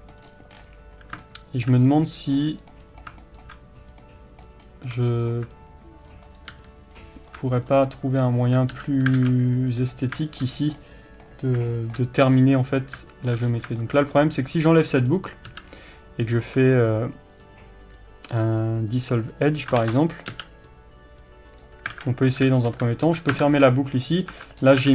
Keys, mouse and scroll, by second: 0.3 scroll up 1, 0.6 scroll down 1, 1.9-2.4 scroll up 1, 2.4-2.8 scroll down 1, 4.7-5.1 scroll up 1, 6.3 click, 6.6 g, 7.2 click, 8.8 f, 9.1 scroll down 1, 9.2 alt+a, 9.4-13.3 middle drag, 10.6 scroll up 1, 13.3 alt+click, 13.5-13.9 scroll down 1, 13.9-22.8 shift+middle drag, 15.1 scroll up 1, 19.2 x, 19.9 ctrl+z, 22.0 alt+a, 22.8 alt+click, 23.1 f, 23.4 scroll down 1, 23.7-24.9 middle drag, 24.4 Tab, 24.7 scroll up 1.